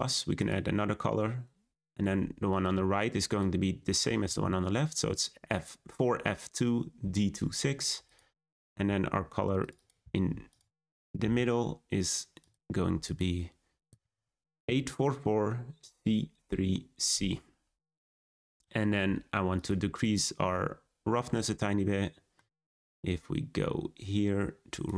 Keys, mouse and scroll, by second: 0.4-2.6 drag, 12.4 click.